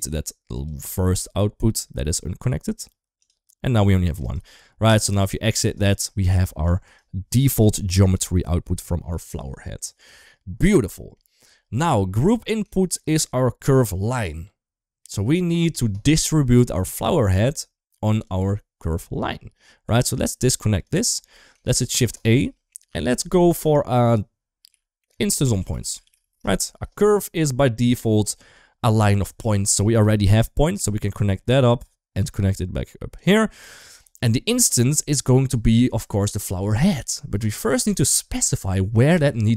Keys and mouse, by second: 4.2-5.0 right drag, 6.0 click, 6.6 right click, 8.0 click, 8.4 click, 10.6 middle click, 12.0 click, 16.7-18.0 drag, 20.2 ctrl+right click, 21.4 shift+a, 30.5-31.4 drag, 32.0-32.9 drag, 33.4 click, 33.6 click, 34.2 middle click, 36.3 middle click, 37.4 middle click.